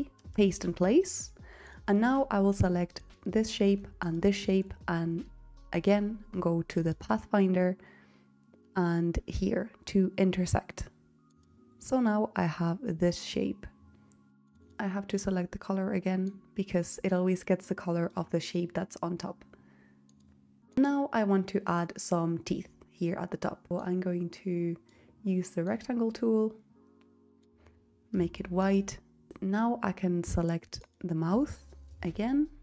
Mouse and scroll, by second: 30.2 click.